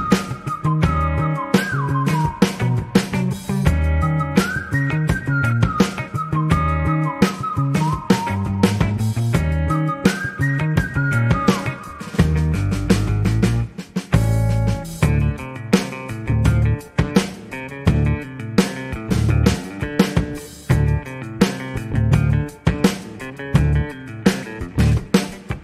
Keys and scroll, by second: 13.8 a, 14.1 a, 18.2 g, 18.3 x.